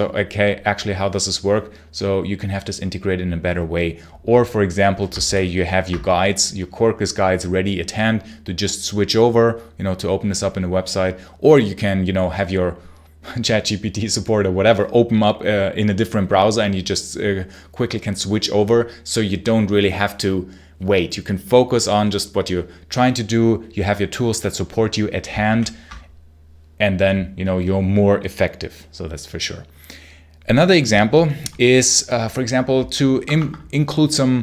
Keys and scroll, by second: 5.1 ctrl+h, 25.4 ctrl+l, 33.0 Escape, 33.2 Escape.